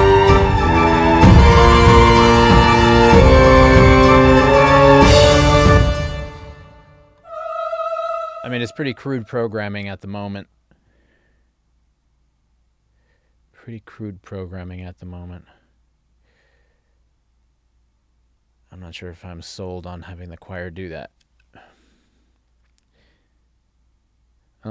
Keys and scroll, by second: 5.7 space.